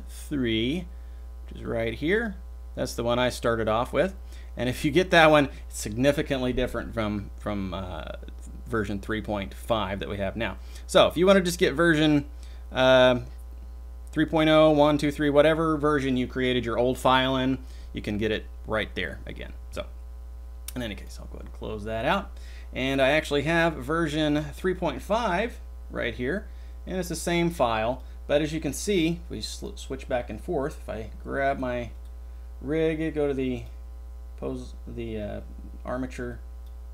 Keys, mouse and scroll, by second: 36.4 click.